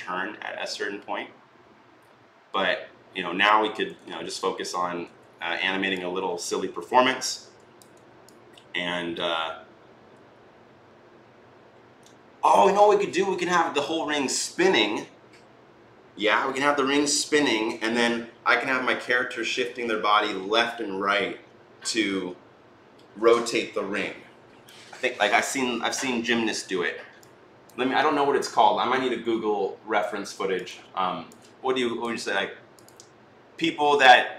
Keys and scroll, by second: 4.1 ctrl+z, 4.8 e.